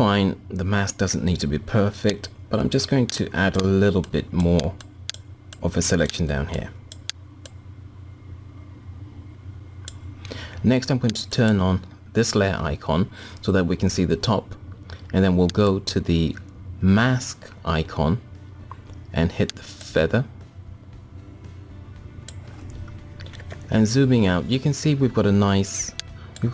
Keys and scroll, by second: 23.0 ctrl+-, 23.8 ctrl+-.